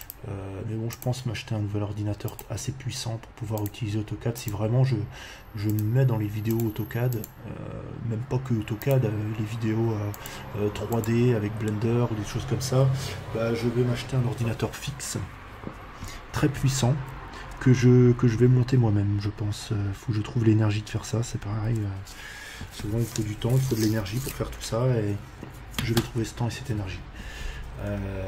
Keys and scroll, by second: 11.4 Escape.